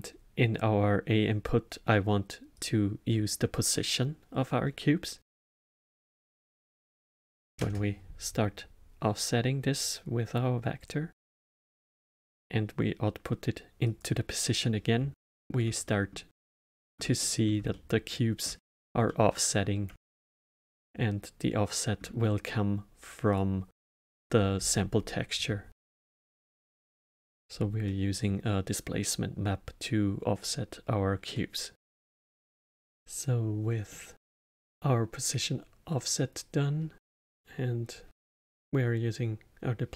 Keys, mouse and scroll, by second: 6.1-9.1 drag, 11.9-14.9 drag, 15.1-23.3 alt+middle drag, 23.3 click, 27.8-30.9 middle drag, 31.3 middle click, 31.8 n, 33.9-36.9 middle drag.